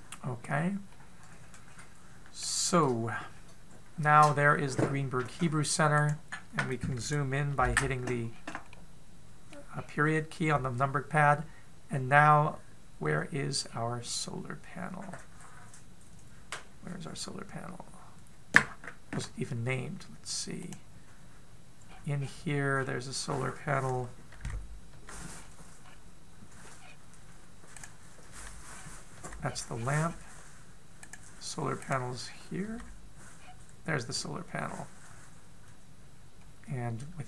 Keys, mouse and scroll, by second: 0.3-1.2 scroll down 1, 1.2 scroll up 1, 1.5 middle click, 3.3-4.1 scroll up 4, 6.6 right click, 8.1 KP_Decimal, 8.9 scroll down 3, 9.3 middle click, 10.3-11.3 scroll down 2, 13.6-14.3 scroll down 1, 14.3-17.5 scroll down 3, 21.3 click, 22.4-23.3 scroll down 8, 23.3-24.3 scroll down 4, 24.3-24.7 scroll up 4, 24.9 KP_Decimal, 25.5 KP_Decimal, 25.9-26.7 scroll up 4, 27.4-28.4 scroll down 2, 28.4 right click, 28.4 scroll down 5, 28.9 KP_Decimal, 29.3-30.0 scroll up 5, 29.7 KP_Decimal, 30.0-31.6 scroll down 18, 31.6 right click, 31.6-32.4 scroll down 1, 32.4 right click, 32.8-33.2 scroll up 4, 33.2 KP_Decimal, 33.9-35.0 scroll down 1, 35.0-35.5 scroll down 5.